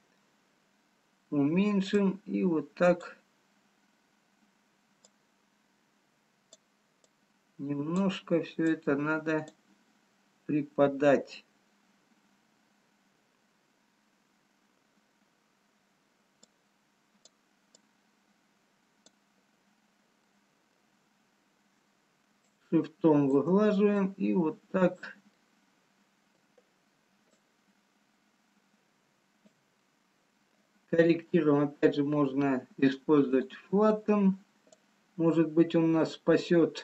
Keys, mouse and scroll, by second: 1.4 scroll down 3, 2.3 click, 8.1 click, 11.1 scroll down 2, 11.7-12.2 scroll down 1, 15.3-16.4 scroll up 2, 16.4 click, 17.8 click, 19.7 scroll down 1, 20.5 middle click, 22.4 shift+click, 24.7 click, 25.5 middle click, 25.5 scroll down 1, 26.6-27.3 scroll up 2, 27.4 shift+click, 29.9 middle click, 33.3 click, 34.0-35.0 scroll up 2, 35.0 click.